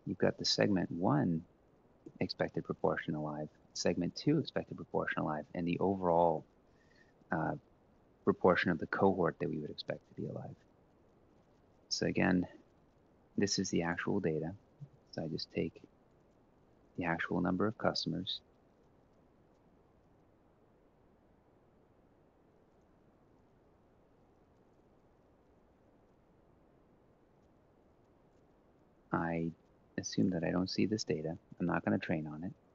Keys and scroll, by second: 0.1-1.8 typing, 3.2-6.1 typing, 9.9 Left, 11.0 Left, 11.4 Down, 14.6 ctrl+c, 16.4 ctrl+v, 18.3-19.2 typing, 20.3-23.1 typing, 23.6 Right, 23.9 ctrl+Down, 24.2 1, 24.4 Up, 24.8 ctrl+c, 25.1 ctrl+shift+Down, 25.4 ctrl+v, 30.5 Delete.